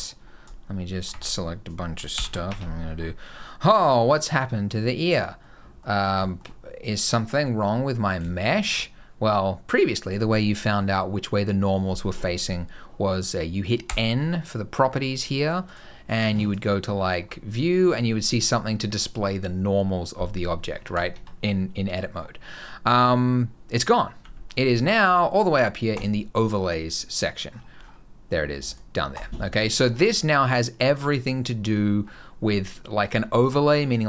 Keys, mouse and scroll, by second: 2.0 ctrl+shift+n, 2.3 Tab, 2.7 scroll down 2, 3.0 scroll up 2, 3.2 middle click, 5.1 scroll down 1, 5.2 middle click, 6.0 scroll up 1, 6.1 shift+middle click, 6.3 middle click, 7.0-8.0 scroll down 1, 8.2 shift+middle click, 13.7 n, 15.5 click, 15.9 click, 16.2 click, 16.8-18.2 scroll down 11, 21.0 Tab, 22.0-22.3 scroll down 5, 22.3-23.2 scroll up 1, 23.2-23.7 scroll up 1, 23.7 scroll down 2, 23.8 scroll up 2, 23.9 scroll down 1, 25.3 n, 25.8 click, 31.4-34.0 scroll down 4.